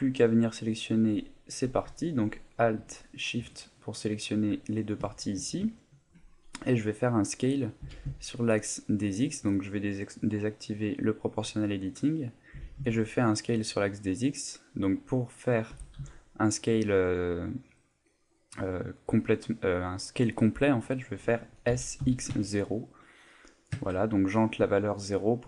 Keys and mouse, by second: 0.2 alt+right click, 2.9 alt+shift+right click, 3.7 middle click, 4.6 alt+middle click, 5.1 shift+middle click, 5.7 ctrl+middle click, 6.3 middle click, 7.8 s, 9.0 right click, 10.2 click, 12.5 s, 14.1 right click, 15.7 s, 18.0 right click, 18.2 middle click, 21.7 s, 24.7 middle click.